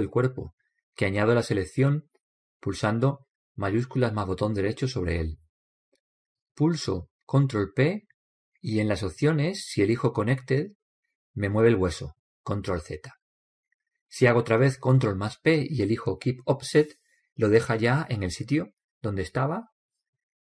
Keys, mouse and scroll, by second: 5.0-6.8 right drag, 8.1 ctrl+p, 13.5 ctrl+z, 15.5 ctrl+p.